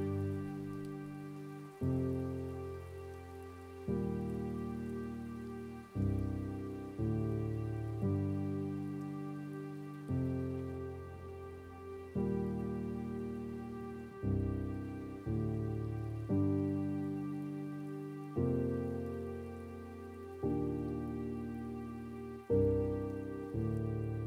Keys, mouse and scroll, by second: 0.9 r, 6.5 scroll down 2, 8.1 click, 8.7 scroll up 2, 10.2 g, 11.7-12.2 scroll down 4, 12.2-12.5 scroll up 5, 14.9 s, 17.3-17.9 scroll down 1, 17.9-18.9 scroll up 1, 18.9 g.